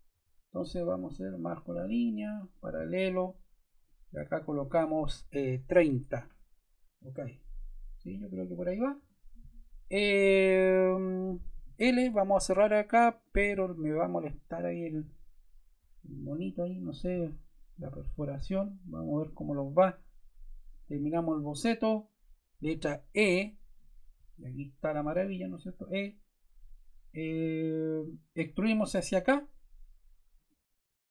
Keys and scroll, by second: 0.0 Escape, 5.1-6.1 typing, 7.7 o, 8.9 Return, 11.5 l, 23.0 e.